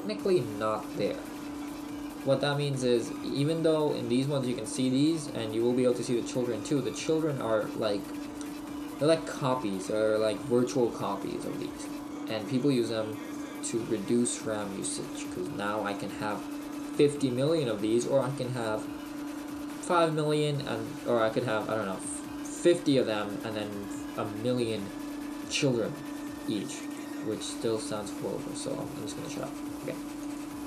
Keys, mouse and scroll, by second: 2.9 right click, 4.1 right click, 27.0 click.